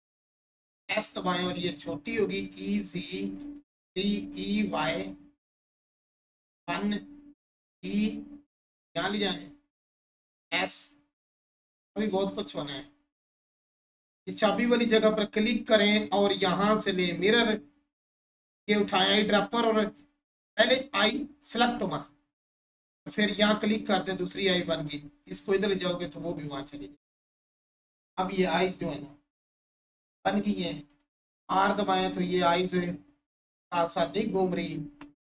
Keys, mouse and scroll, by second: 1.7 click, 3.4 3, 5.9 click, 6.3 1, 6.7-8.6 scroll up 1, 8.9 click, 9.3 scroll up 1, 10.5 click, 11.0-11.5 scroll up 1, 11.7-13.6 alt+shift+drag, 16.9 click, 23.2 click, 25.7 right click, 26.1-26.6 scroll down 1, 26.7-29.9 drag, 30.9 click, 33.4 right click, 34.3 click.